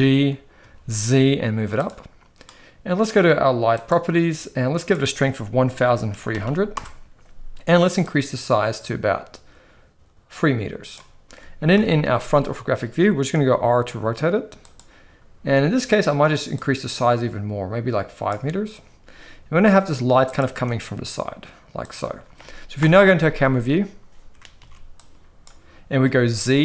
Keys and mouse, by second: 3.8 click, 4.8-6.8 drag, 6.4 0, 8.0-10.9 drag, 11.7 KP_1, 13.3 r, 16.6-18.3 drag, 19.3 g, 20.6 r, 22.7 KP_0, 24.6 ctrl+b, 26.0 z.